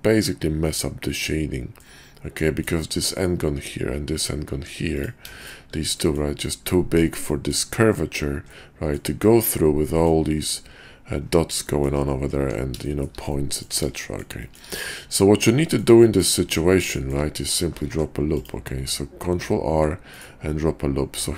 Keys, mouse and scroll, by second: 2.4 middle click, 4.4 Tab, 5.9 middle click, 7.3 click, 8.5 middle click, 9.8 middle click, 11.6 shift+click, 12.4 Tab, 12.8 shift+middle drag, 13.3-13.6 middle drag, 13.9 shift+middle click, 14.4 shift+middle drag, 15.6 click, 16.1-16.4 drag, 16.4 Tab, 16.9 shift+click, 17.9 ctrl+r, 20.2 click.